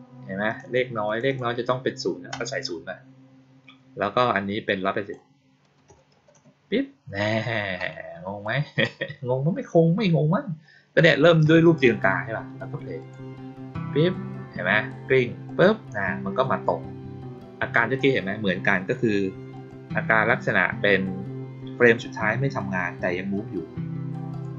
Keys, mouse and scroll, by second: 0.4 click, 1.0 click, 1.2 click, 4.6 click, 8.3-8.7 drag, 12.9 click, 15.4 click, 19.5 click, 24.2 click.